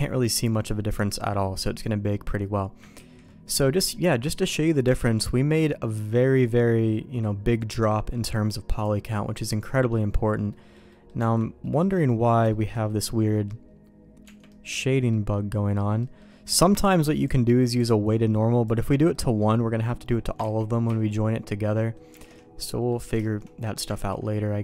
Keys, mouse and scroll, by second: 3.0 ctrl+s, 3.4 middle click, 8.1 middle click, 8.7 click, 9.4 click, 10.4 middle click, 10.9 middle click, 11.1 Tab, 11.6 middle click, 11.9 middle click, 12.4 shift+middle click, 13.0 middle click, 14.4 middle click, 15.1 middle click, 15.9 middle click, 17.2-18.7 drag, 19.1 middle click, 20.4 ctrl+z, 20.8 ctrl+z, 21.7 middle click, 22.1 alt+a, 22.6 middle click, 23.2 shift+middle click, 24.0 ctrl+s.